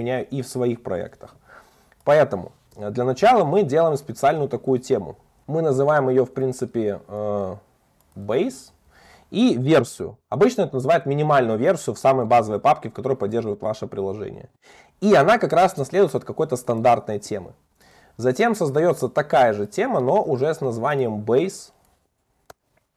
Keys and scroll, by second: 5.4 super+z, 5.5 super+BackSpace, 6.4 super+d, 15.0 Escape, 18.8 alt+Up, 20.3 super+v.